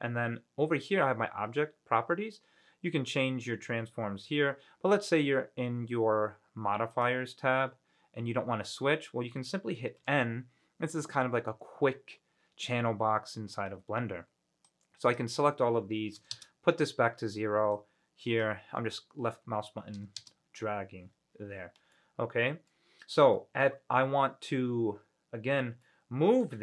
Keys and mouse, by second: 7.1 click, 9.5 middle click, 10.2 n, 14.9-16.5 drag, 17.9-20.4 drag, 22.1-22.9 middle drag, 23.5-23.8 middle drag, 26.0-26.6 middle drag.